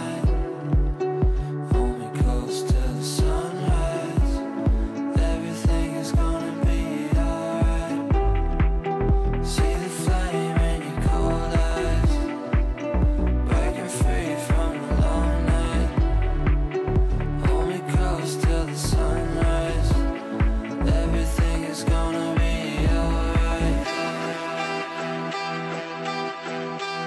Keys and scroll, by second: 11.1 shift+Page_Down, 14.2 shift+Page_Down, 22.5 Delete, 23.2 ctrl+z.